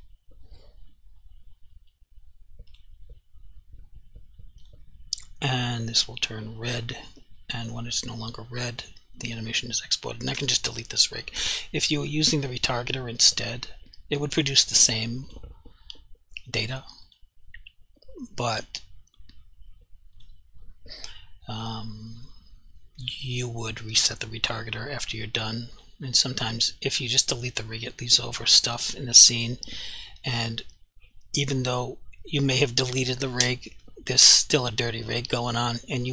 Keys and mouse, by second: 0.0 click, 2.7 click, 10.4 Delete, 12.0 click, 15.3 click, 20.2 click, 23.3 click.